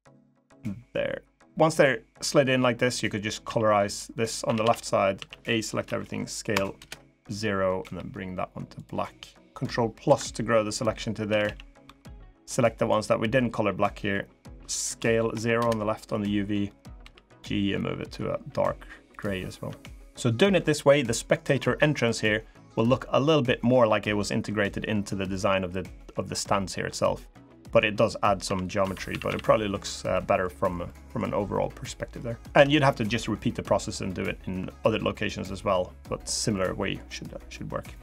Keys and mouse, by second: 3.2 a, 4.2 a, 5.6 s, 7.6 g, 9.8 ctrl+KP_Add, 11.0 a, 11.2 a, 11.6 b, 14.7 s, 16.8 g, 19.4 Tab, 28.2 Tab, 28.6 Tab, 28.9 a, 29.0 a, 29.9 middle click, 30.6 middle click, 31.6 middle click, 32.4 Tab, 36.3 middle click, 37.0 middle click, 37.6 middle click.